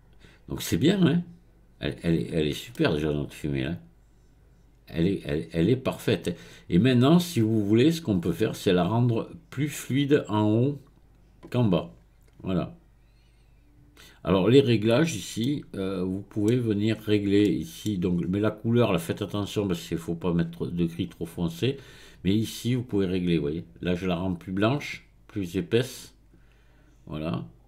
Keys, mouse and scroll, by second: 2.0 click, 2.7-11.6 middle drag, 14.2-15.4 drag, 15.4-17.0 middle drag, 17.0-17.4 scroll up 2, 17.4-18.2 middle drag, 18.2-20.8 scroll up 2, 20.8-21.3 scroll up 1, 22.7-25.7 drag.